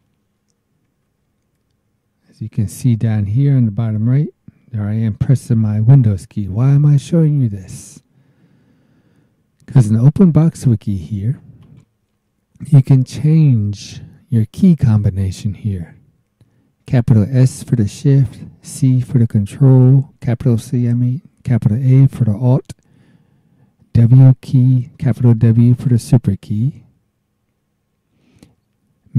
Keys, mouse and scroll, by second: 11.6 click.